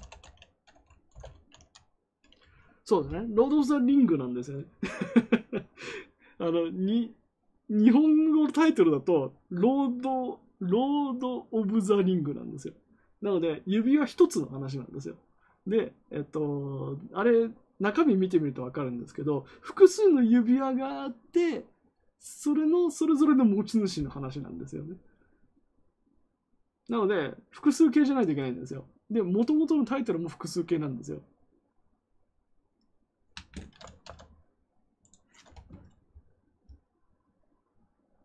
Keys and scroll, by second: 0.0-2.0 typing, 2.4 Return.